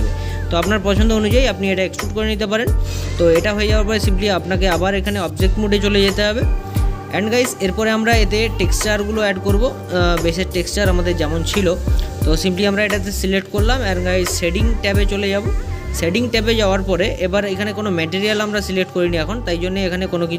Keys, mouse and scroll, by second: 4.0-5.5 drag, 6.1-11.9 middle drag, 11.9-14.2 drag.